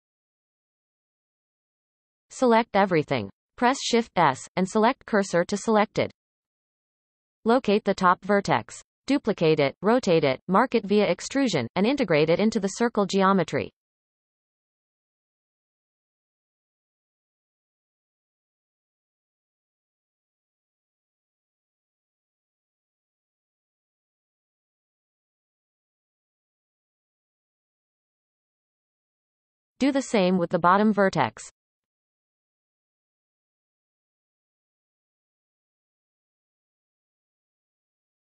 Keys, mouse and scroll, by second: 1.3-2.4 shift+middle drag, 2.4 shift+s, 5.3 scroll up 2, 5.9-6.4 shift+middle drag, 6.4-7.7 scroll up 7, 7.2-7.5 shift+middle drag, 8.5 click, 9.3-14.7 shift+middle drag, 14.7 shift+d, 18.3 shift+middle click, 18.8 scroll up 1, 19.6 e, 21.0-21.4 shift+middle drag, 21.4-22.3 scroll up 2, 22.3 drag, 23.0 shift+click, 23.5 x, 25.3 click, 25.7 shift+click, 26.4 f, 26.9 click, 27.3 shift+click, 28.1 f, 28.3-29.0 scroll down 7, 29.0 shift+middle click, 29.4-30.9 scroll up 2, 30.9 click, 31.3-34.2 shift+middle drag, 34.2-34.6 scroll up 2, 34.6 shift+middle click, 35.5 shift+d, 37.4 e.